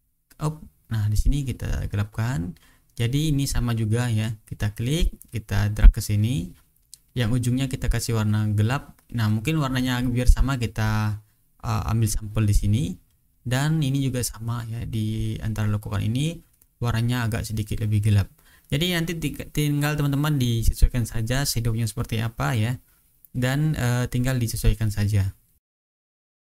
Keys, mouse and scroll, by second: 0.5-3.0 drag, 3.8 click, 5.0-6.4 drag, 6.5 click, 8.8 click, 9.8 click, 11.8 click, 12.8-13.5 ctrl+scroll down 2, 13.5-14.3 ctrl+scroll up 2, 16.8-17.9 drag, 19.6 click, 21.3 click, 24.5 click, 25.0-25.6 ctrl+scroll up 2, 25.8 click, 26.1 click, 26.4 click.